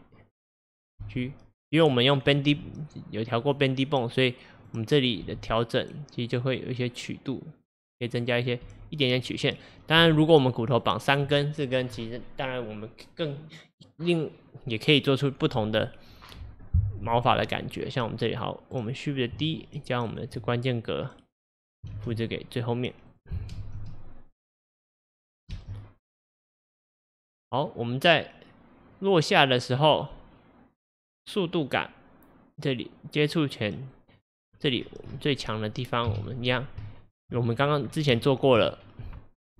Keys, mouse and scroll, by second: 1.1 g, 2.6 r, 4.7 click, 5.3 r, 8.7 r, 10.1 g, 18.1-19.6 drag, 20.2 shift+click, 20.9-22.0 drag, 22.0 shift+d, 23.7 space, 25.6 space, 26.2-34.5 drag, 34.5 scroll down 1, 36.2 KP_3, 36.9-37.3 shift+middle drag, 37.3-38.0 scroll up 9, 38.3-38.8 shift+middle drag, 38.8 scroll up 1.